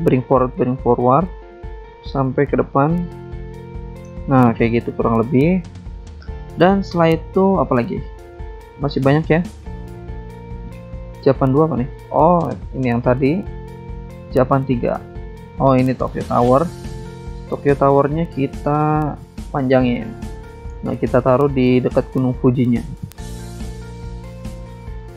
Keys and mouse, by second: 0.7 double click, 2.0 click, 2.1 click, 2.8 click, 3.6 click, 5.4 click, 5.6 click, 6.0 click, 6.1 double click, 7.8 double click, 7.9 click, 9.3 click, 9.4 click, 9.9 click, 10.0 click, 10.6 click, 10.7 click, 12.0 click, 14.9 click, 15.0 click, 16.6 alt+Tab, 17.2 alt+Tab, 19.1 click, 19.2 click, 19.7 click, 20.0 alt+Tab, 21.4 BackSpace, 22.6 alt+Tab, 22.6 click, 23.0 alt+Tab.